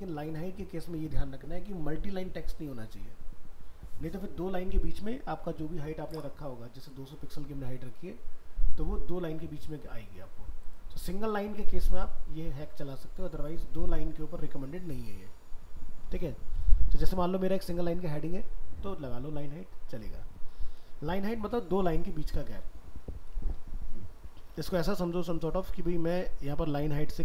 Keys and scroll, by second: 23.2 alt+Tab.